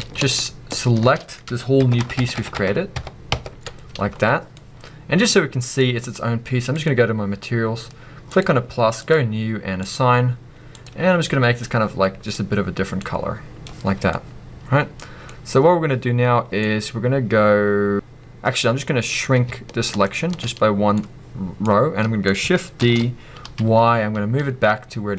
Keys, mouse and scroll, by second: 0.0 a, 0.7 alt+shift+click, 4.5-6.8 drag, 8.5 click, 13.8 scroll down 1, 14.1-15.8 middle drag, 15.8-16.6 scroll up 1, 16.6 middle click, 18.8 scroll up 2, 18.9 middle click, 20.0 alt+shift+click, 20.5 middle click, 21.5 scroll up 2, 21.6 middle click, 22.9 shift+d.